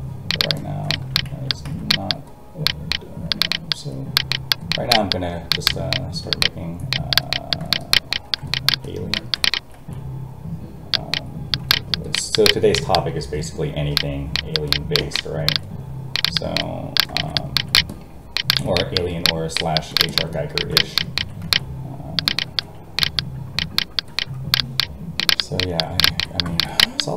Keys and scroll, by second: 1.3 ctrl+z, 9.8 alt+a, 21.4 alt+a.